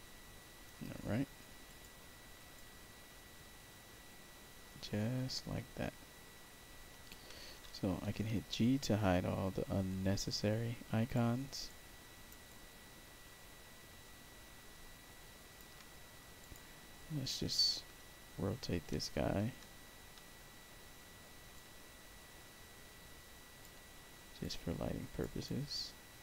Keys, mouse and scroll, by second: 1.6 click, 2.5-7.0 alt+drag, 7.8 g, 8.7-11.1 alt+drag, 11.6 alt+right click, 12.4-15.5 alt+drag, 16.3 click, 17.9 r, 19.5 r, 20.1 e, 21.5-23.5 drag, 24.3 alt+click, 25.4 alt+right click.